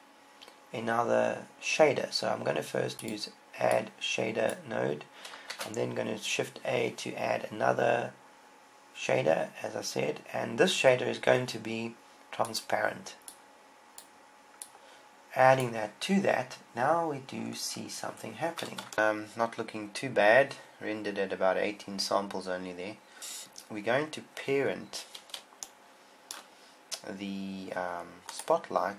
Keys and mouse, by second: 0.0-1.3 drag, 6.4 shift+a, 23.2 ctrl+Up, 28.8-28.9 right drag.